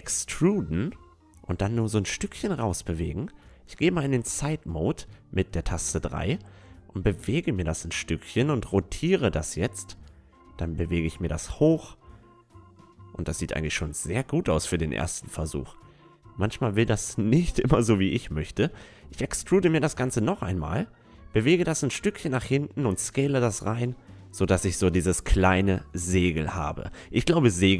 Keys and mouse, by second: 3.2 KP_3, 4.4-6.4 drag, 7.0 r, 9.9-12.8 drag, 12.3-15.7 middle drag, 14.1-17.5 drag, 17.6 e, 19.3-21.0 drag, 20.6 s, 22.7-24.6 drag, 23.6 Tab, 26.9-27.7 middle drag.